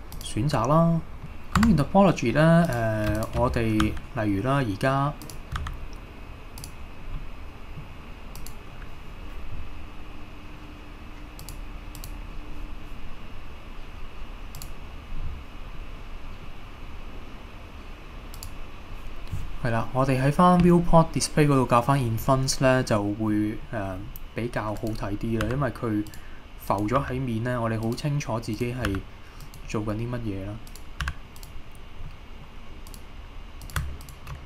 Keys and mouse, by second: 0.1 click, 1.2 Tab, 1.6 Tab, 2.7 drag, 3.9 e, 5.3 click, 5.6 e, 6.6 click, 7.2 middle click, 11.4 click, 14.6 click, 18.4 click, 22.8-23.3 middle drag, 23.7-24.0 middle drag, 24.8 click, 25.5 g, 26.1 click, 27.0 g, 27.9 click, 28.6 click, 28.9 g, 29.4 click, 30.7 click, 31.1 g, 31.4-32.1 drag, 32.1-32.5 middle drag, 33.7 click.